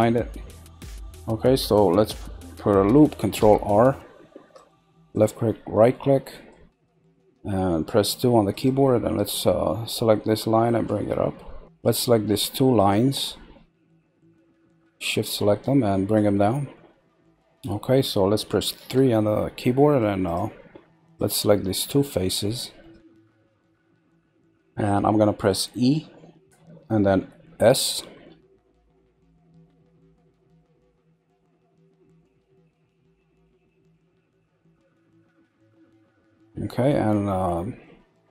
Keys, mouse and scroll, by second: 0.2-0.9 middle drag, 0.9-2.8 scroll down 1, 3.4 ctrl+b, 6.2-8.1 middle drag, 8.1 z, 8.5 click, 9.9 click, 11.6-12.8 middle drag, 12.8 click, 14.6 shift+click, 16.1 click, 17.2 middle click, 18.8 3, 19.7 middle click, 20.2 click, 21.0 shift+click, 21.6-24.6 middle drag, 35.1 scroll, 35.8-37.4 middle drag, 37.8-38.3 middle drag.